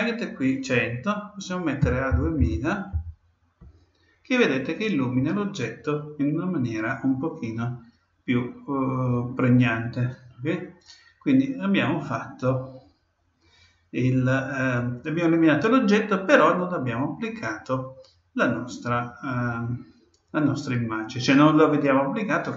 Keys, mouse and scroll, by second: 2.3 0.